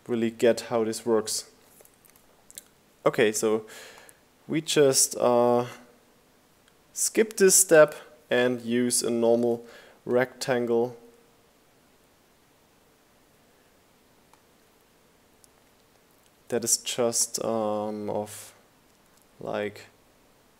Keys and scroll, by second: 20.4 Down.